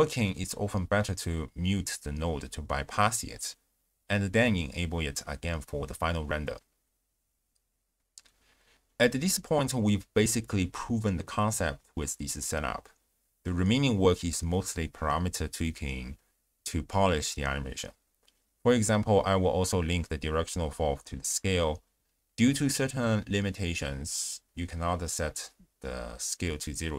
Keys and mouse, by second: 2.6 click, 3.2 click, 3.8 click, 4.2 x, 4.5 click, 4.8 m, 6.4 space, 7.3 space, 7.4 click, 7.8 m, 7.9 shift+space, 9.0 ctrl+alt+shift+q, 15.2-17.1 drag, 17.5 click, 19.2 click, 19.9 click, 21.0-22.2 drag, 22.7 click.